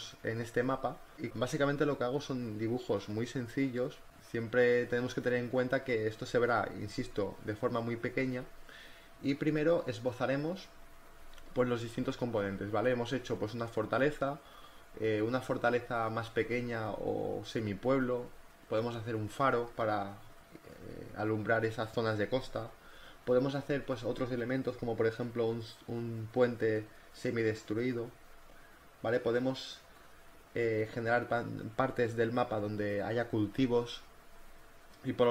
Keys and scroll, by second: 4.3 ctrl+t, 4.7 Return, 4.9 v, 8.1 ctrl+t, 8.3 Return, 8.6-11.4 typing, 8.9 ctrl+v, 10.7 ctrl+t, 12.0 ctrl+z, 13.6 ctrl+z, 14.1 ctrl+z, 19.8 b, 19.9 ctrl+z, 20.9-22.3 typing, 24.3 ctrl+r, 24.4 ctrl+t, 24.6 Return, 24.8 v, 26.7 space, 26.9 ctrl+t, 27.4 ctrl+t, 27.7 Return, 27.9 b, 28.2 ctrl+z, 28.4 [, 30.9 ctrl+t, 31.4 Return, 31.6 v, 31.8 ctrl+z, 32.4 b, 33.1 ].